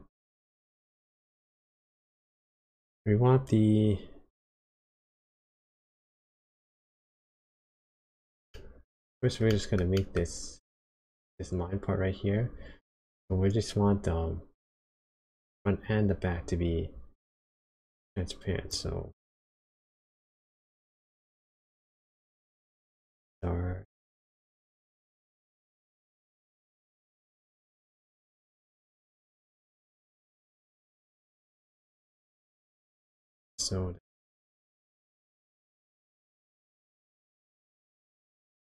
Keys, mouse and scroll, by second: 4.4 click, 7.6 click, 8.5 middle click, 9.5 shift+middle click, 9.9 middle click, 17.8 click, 19.6 click, 21.0 click, 22.7 click, 26.3 click, 30.1 click, 33.5 click, 35.5 click, 38.5 click.